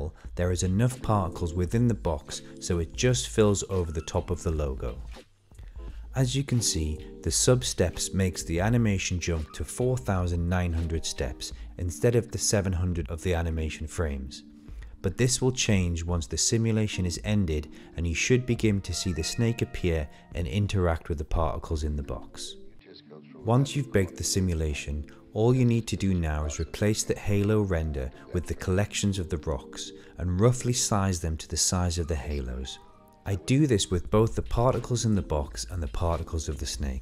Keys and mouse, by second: 11.5-11.9 middle drag, 12.2 shift+middle click, 22.2 middle click, 22.5 middle click, 23.6 shift+middle click, 24.8 click, 28.1 shift+middle click, 28.3 middle click, 29.3 shift+middle drag, 29.3 shift+space, 30.6-31.1 middle drag, 31.2 shift+middle click, 32.3 click, 32.4 middle click, 33.2-33.9 drag, 34.4 middle click, 35.4-36.7 drag, 36.9 click.